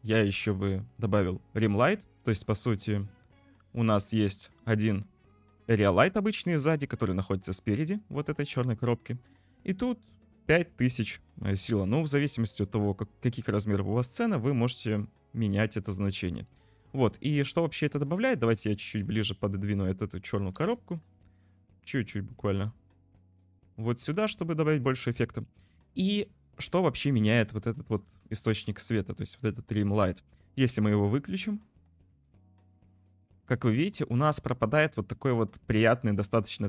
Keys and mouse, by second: 1.1 click, 2.9 click, 3.1 middle click, 3.8 middle click, 4.1 click, 4.9 middle click, 5.1 click, 6.2 middle click, 6.5 click, 7.4 click, 8.6 middle click, 9.6 click, 11.7 middle click, 12.2 click, 12.5 middle click, 16.0 `, 18.5 click, 18.6 middle click, 19.7 `, 20.6 g, 27.5 g, 28.4 shift+middle click, 28.7 shift+middle click, 28.8 shift+middle click, 32.1 click, 32.6 click, 33.4 click, 33.8 click, 34.5 shift+middle click.